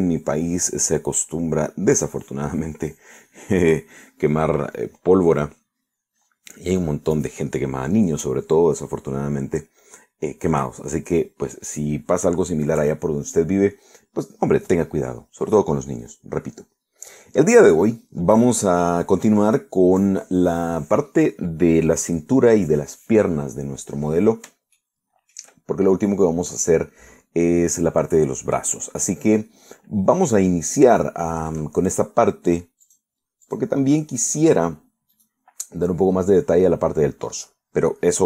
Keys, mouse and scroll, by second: 25.9 shift+middle click, 27.1-31.4 middle drag, 32.1 shift+middle click, 33.9 click, 34.5 click, 36.2 right click.